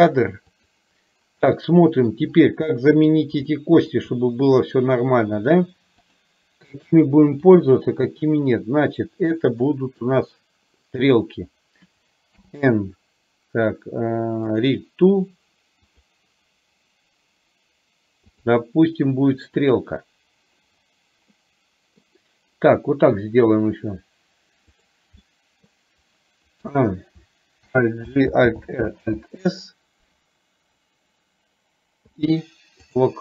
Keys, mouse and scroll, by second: 1.6 middle click, 2.8 middle drag, 3.6-3.9 shift+middle drag, 6.2 click, 7.6 shift+click, 9.7 middle click, 14.6 click, 15.9-18.6 drag, 21.4-22.1 middle drag, 24.9 click, 25.3-25.7 middle drag, 28.7 alt+r, 29.2 alt+s, 32.1 i.